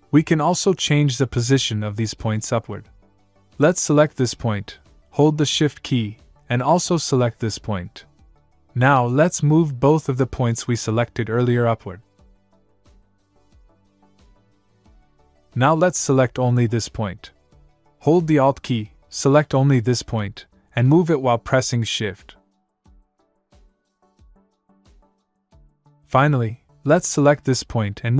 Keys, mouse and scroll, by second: 4.7 click, 7.0 shift+Num_Lock, 8.0 shift+click, 10.2 click, 19.9 alt+Num_Lock, 20.5 alt+click.